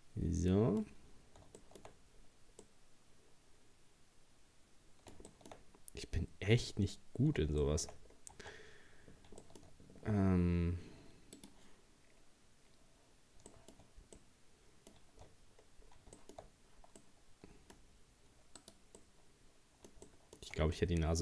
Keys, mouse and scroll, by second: 0.9-1.3 scroll up 1, 1.6 scroll up 2, 1.6 shift+middle click, 2.2-2.6 scroll down 1, 2.6-5.7 middle drag, 5.7 scroll up 1, 6.3-6.6 scroll up 1, 7.6 scroll up 1, 7.6 shift+middle click, 8.1 scroll down 3, 8.4 Tab, 9.1 scroll up 1, 9.4 shift+middle click, 9.7 scroll up 1, 13.5-15.2 middle drag, 15.2-16.2 shift+scroll down 4, 16.2 shift+middle click, 16.5-17.0 scroll up 1, 17.0 middle click, 17.8-18.6 scroll up 2, 18.6 right click, 19.0-21.2 middle drag.